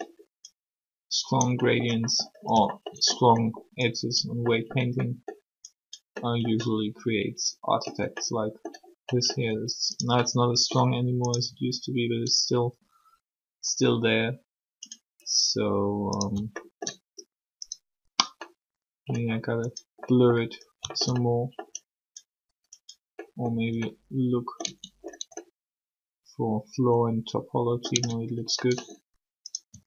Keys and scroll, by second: 11.5 r, 24.6 Tab, 27.9 Tab, 29.7 r.